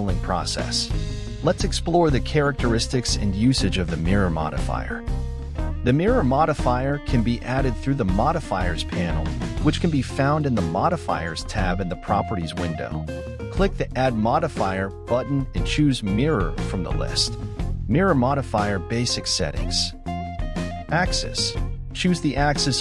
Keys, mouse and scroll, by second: 2.4-2.9 scroll up 1, 2.9 x, 4.1-5.9 scroll up 5, 5.9 ctrl+z, 9.2-10.7 shift+middle drag, 10.7-11.6 scroll up 5, 11.6 ctrl+click, 14.4 x, 16.5-17.5 scroll down 11, 17.5-18.9 middle drag, 18.9 KP_1, 19.8-20.9 shift+middle drag, 20.9 Tab.